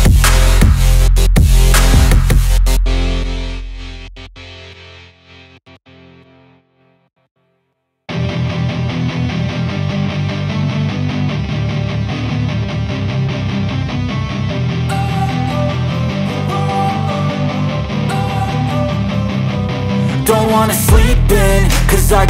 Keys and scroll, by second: 12.4 ctrl+c, 12.7 ctrl+v, 18.7 ctrl+a.